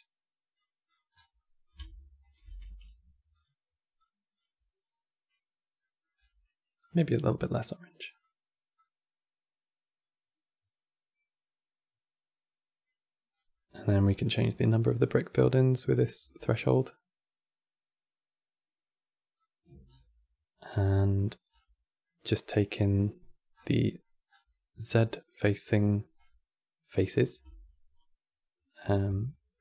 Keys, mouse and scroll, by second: 0.6 click, 0.8 scroll down 8, 1.1 middle click, 1.9 ctrl+shift+click, 2.3 g, 3.7 click, 4.5 scroll down 2, 5.5 middle click, 5.8-6.5 scroll up 10, 6.5 click, 13.0 scroll down 3, 13.2 middle click, 13.7 scroll up 10, 13.9-14.5 scroll down 1, 16.2-19.2 shift+drag, 19.7 scroll down 6, 20.7 middle click, 21.2 scroll down 4, 21.7-23.2 middle drag, 23.2 scroll down 5, 23.5 middle click, 24.0 scroll down 4, 24.2-25.9 middle drag, 25.9-27.1 scroll up 7, 28.8-29.6 middle drag.